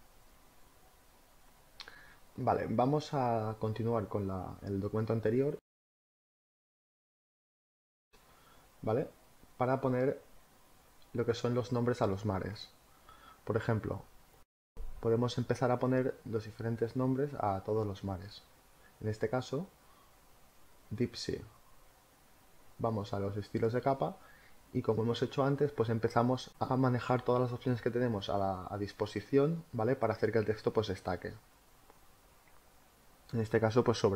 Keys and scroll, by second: 5.8 space, 8.5 v, 20.1 t, 22.1 d, 23.1-25.2 typing.